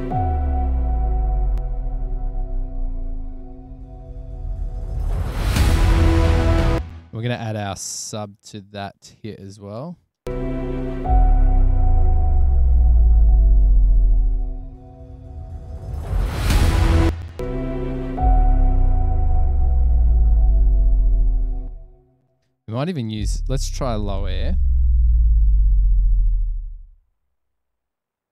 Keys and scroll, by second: 1.1 BackSpace, 2.3 f, 2.9 f, 5.5 super+=, 6.9 space, 10.2 space, 17.2 space, 17.4 space, 22.2 space, 22.4 space, 24.8-25.6 typing, 26.9 BackSpace, 27.5 Page_Down, 27.7 Page_Down, 27.8 Page_Down.